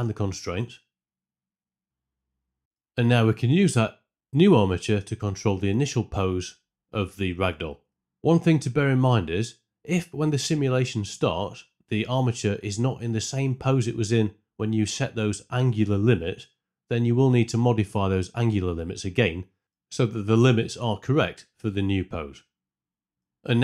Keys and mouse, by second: 0.0 click, 0.5 click, 0.8 click, 1.0 click, 3.5 Tab, 4.8 r, 5.1 x, 5.1 KP_4, 5.2 KP_Enter, 5.2 KP_5, 6.4 space, 6.6 space, 6.6 shift+Left, 6.7 space, 6.9 space, 7.0 shift+Left, 7.7-8.8 Right, 9.6 shift+Left, 10.4 Tab, 16.2 click, 16.5 KP_5, 19.6-20.9 drag, 21.7 shift+Left, 22.2 space, 23.0 space, 23.1 Tab.